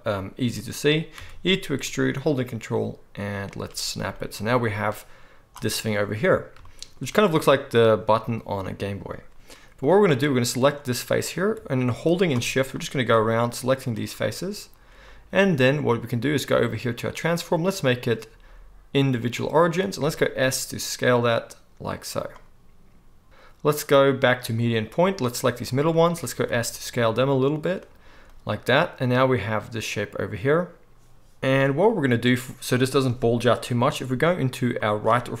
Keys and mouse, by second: 1.1 e, 3.6-4.8 ctrl+middle drag, 4.8-22.3 drag, 20.0 s, 22.3-23.8 middle drag, 23.8-27.6 drag, 26.3 s, 27.6-35.4 middle drag.